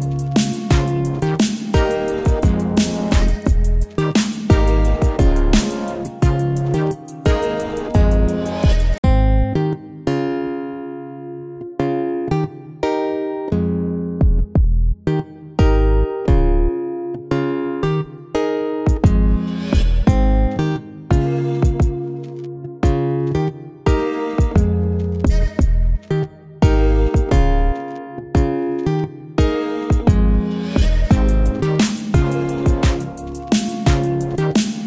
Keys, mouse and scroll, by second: 1.7 click, 5.6 click, 6.6-7.4 typing, 10.9 click, 11.7-12.6 typing, 14.1 click, 14.4-20.5 drag, 23.7 click, 27.6 ctrl+0, 29.5 click, 31.2 right click, 32.2-34.8 drag.